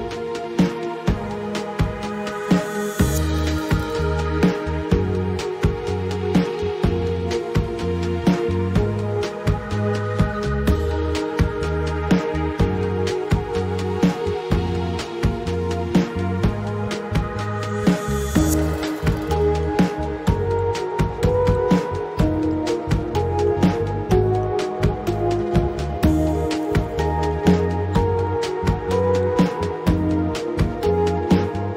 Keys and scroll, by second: 16.3-17.5 typing.